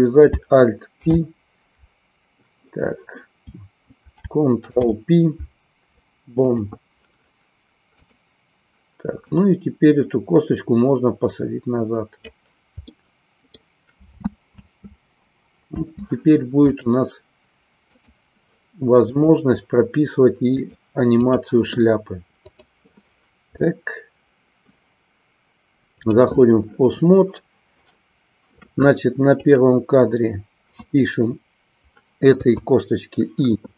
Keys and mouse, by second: 7.9-12.3 drag, 12.9 middle click, 14.2 alt+space, 16.8-18.3 drag, 19.0 click, 20.7 click, 22.5 click, 23.7-24.7 middle drag, 29.4 click.